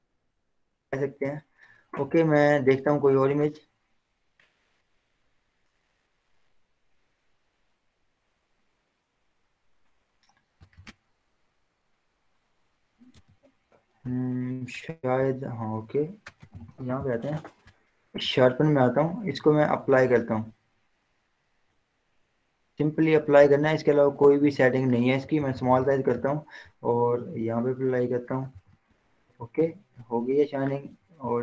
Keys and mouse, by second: 3.8-10.8 drag, 13.4 z, 14.6-16.4 drag, 16.4 ctrl+j, 18.3-25.3 drag, 25.3 [, 25.5 [, 25.7 [, 25.9 [, 27.0-28.9 drag, 29.1 ctrl+0, 29.2 z, 30.3 click, 30.9 b.